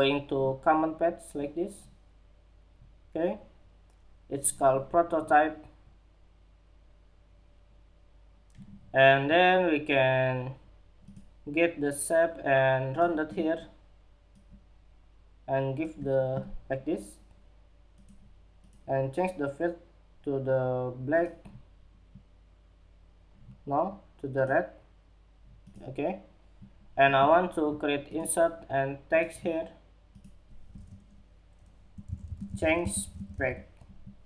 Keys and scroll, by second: 33.1 Escape.